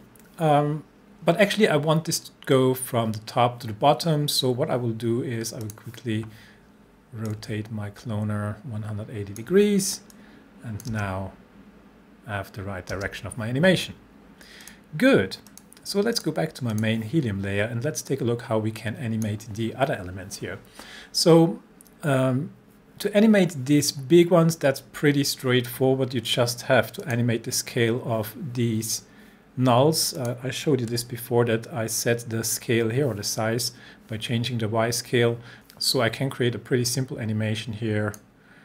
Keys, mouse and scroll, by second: 5.6-10.1 drag, 10.1-11.1 click, 10.9 space, 13.0 space, 14.7-19.4 drag, 27.0 click, 30.2 click, 30.9 s, 35.5 drag.